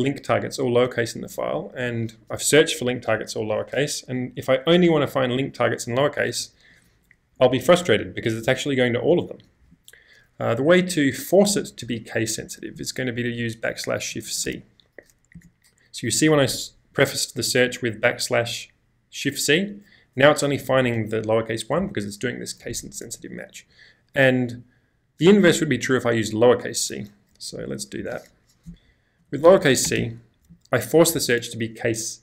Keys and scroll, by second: 1.7 /, 2.3 Up, 3.3 Return, 6.4 n, 6.7 n, 7.3 n, 7.8 n, 9.1 n, 9.4 n, 11.5 /, 12.4 Up, 12.7 Left, 13.0 Left, 13.1 Left, 13.2 Left, 20.5 n, 20.8 n, 27.6 /, 28.0 Up, 28.7 Left, 29.0 Left, 29.1 Left.